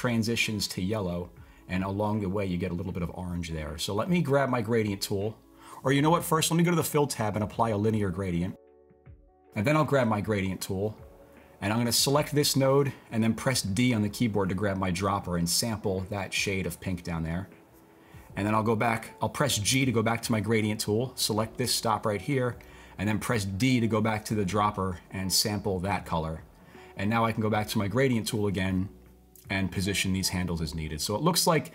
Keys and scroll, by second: 13.8 d, 19.5-20.5 typing, 23.6 typing.